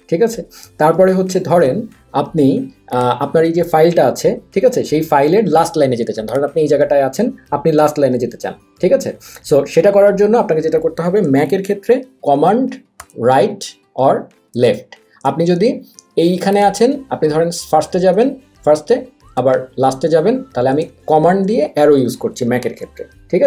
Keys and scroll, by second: 14.5 super+Left, 17.7 super+Left, 19.3 super+Right.